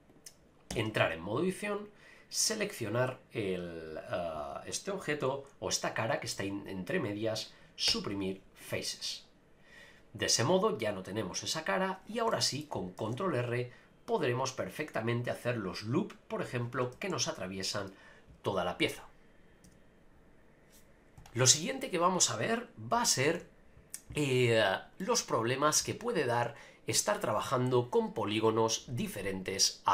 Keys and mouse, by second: 0.7 Tab, 1.8-3.7 drag, 6.3-7.4 middle drag, 7.9 Delete, 12.1 click, 12.3 middle click, 13.0 ctrl+r, 16.3 right click, 17.1 ctrl+z, 23.4 KP_Divide, 25.0 middle click.